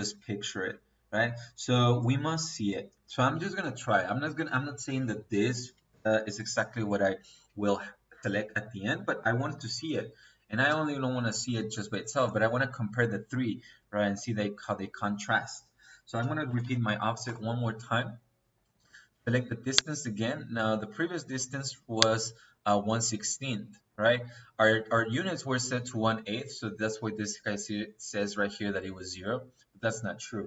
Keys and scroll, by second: 5.4 Escape, 16.1 o, 16.4 f, 17.1 Return.